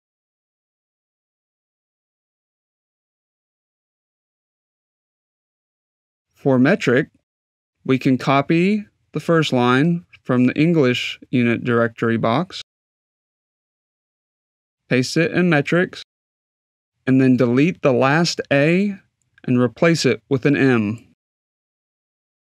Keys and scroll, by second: 19.2 BackSpace, 20.0 m.